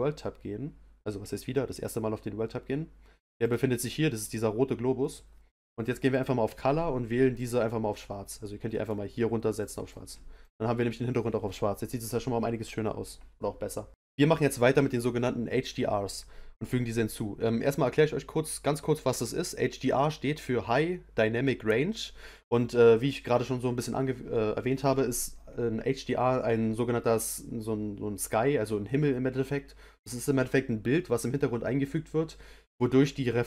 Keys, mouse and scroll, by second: 7.3 click, 9.6 click, 10.4 click.